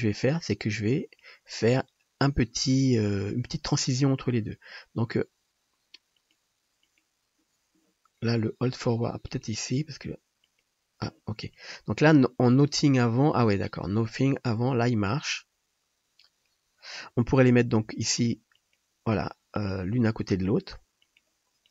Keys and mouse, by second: 6.3-9.3 drag, 17.8 g, 18.7-19.5 drag, 20.0 g, 21.3-21.7 drag.